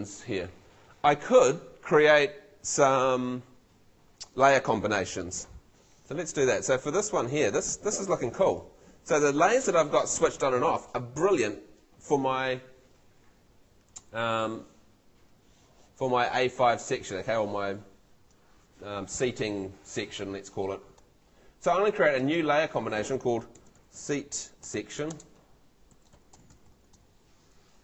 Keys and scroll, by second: 14.1 super+l, 23.4-27.5 typing.